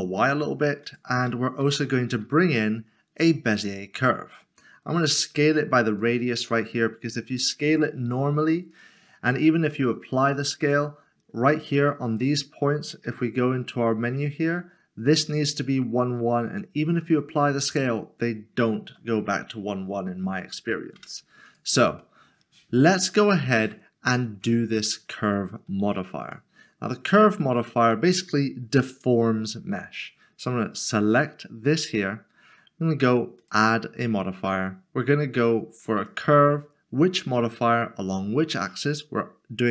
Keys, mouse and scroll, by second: 0.3 click, 1.6 typing, 3.5 click, 6.0 click, 8.7 click, 11.5 Tab, 11.9 click, 13.0 double click, 13.2 typing, 21.0 n, 21.5 Tab, 22.0 middle click, 26.2 click, 33.4 click, 36.0 click.